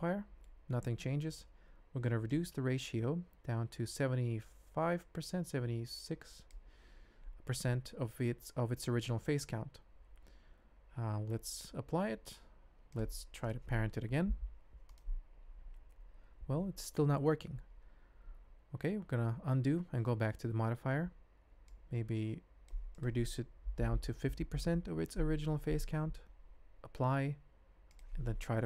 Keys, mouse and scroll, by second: 0.4 ctrl+middle click, 2.5-6.5 drag, 10.1 shift+z, 11.9 ctrl+a, 12.9 click, 14.2 ctrl+p, 18.8 ctrl+z, 19.3 ctrl+z, 20.0 ctrl+z, 21.8 click, 23.0-25.5 drag, 27.0 ctrl+a, 27.9 shift+click.